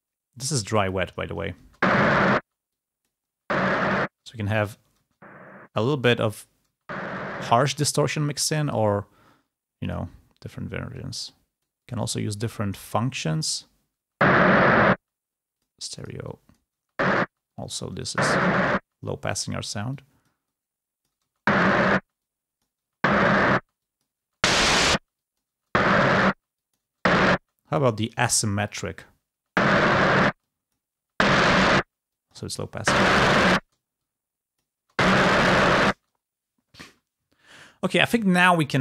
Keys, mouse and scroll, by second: 0.3-1.3 drag, 2.6-4.0 drag, 2.6 space, 4.0 space, 5.6 space, 11.0-12.2 drag, 14.9 space, 17.7 space, 21.9 space, 25.0-29.4 drag, 25.0 space, 29.4 space, 34.0-35.7 drag.